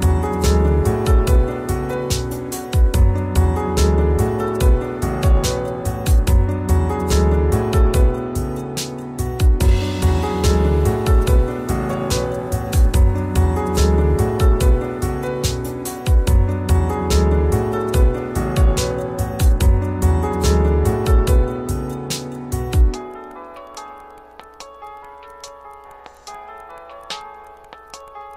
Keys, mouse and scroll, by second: 5.1 ctrl+space, 5.3 ctrl+click, 5.5 ctrl+space, 5.5 typing, 6.7-8.0 typing, 7.7 click, 8.9-9.8 scroll up 1, 9.8 click, 15.6 right click, 15.6 right click, 16.9 click, 18.5 scroll up 1, 19.0-21.4 alt+right drag, 21.4-23.3 drag, 23.3 scroll down 1, 25.1 scroll up 1, 26.2 scroll down 1.